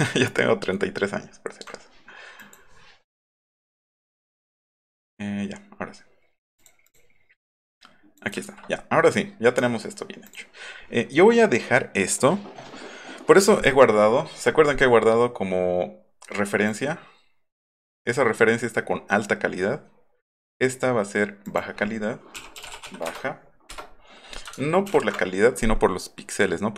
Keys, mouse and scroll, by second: 0.0 alt+scroll down 1, 0.5 alt+scroll up 1, 0.6 alt+middle click, 0.9 alt+middle click, 1.3 alt+middle click, 2.4 click, 4.0 click, 5.8 click, 8.5 ctrl+z, 10.3 click, 16.7 click, 17.5 click, 21.5 click, 22.1-23.2 typing, 23.7 Return, 24.9 ctrl+t.